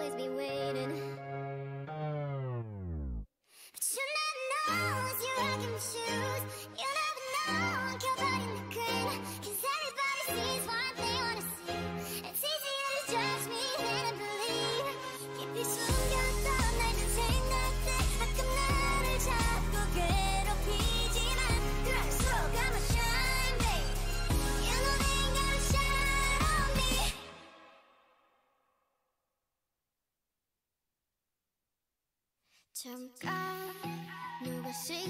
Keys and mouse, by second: 1.4 x, 4.1-6.5 drag, 6.0-7.6 right drag, 6.6 x, 9.2-11.5 right drag, 10.5-11.5 drag, 10.5 x, 11.5 x, 11.9 click, 11.9-14.9 right drag, 13.7 g, 14.9 click, 15.4 g, 17.8-19.0 drag, 17.9 g, 21.0 g, 22.6-24.7 drag, 22.8 g, 24.9 Tab, 27.5 Tab, 28.0-29.0 drag, 28.2 g, 29.4 g, 31.5 g, 32.6 g, 33.5 g, 34.6 g.